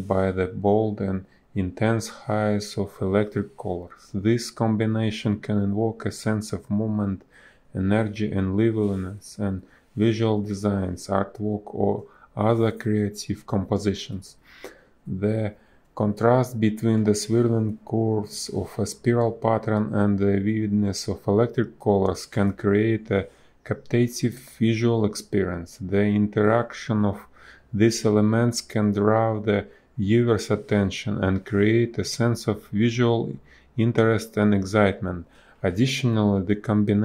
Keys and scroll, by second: 0.7 b, 2.2 ctrl+z, 3.6 a, 3.8 space, 6.0 space, 11.1 b, 15.2 space, 17.8 ctrl+z, 22.6 space, 31.6 a, 31.7 space.